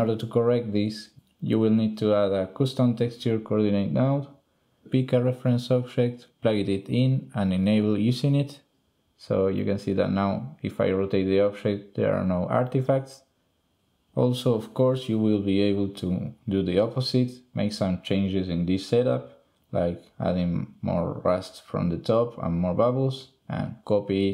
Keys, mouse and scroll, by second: 1.2 g, 2.4 click, 3.4-4.3 drag, 4.4 click, 4.8 click, 5.5 shift+click, 6.0 click, 6.9 click, 7.6 drag, 8.4 r, 9.9 shift+drag, 9.9 middle click, 10.6 r, 11.8 click, 12.3 click, 13.5 r, 14.4 click, 14.8 n, 14.9 click, 15.9 shift+n, 16.2 click, 17.5 click, 19.4-21.2 drag, 23.1 click, 24.2 drag.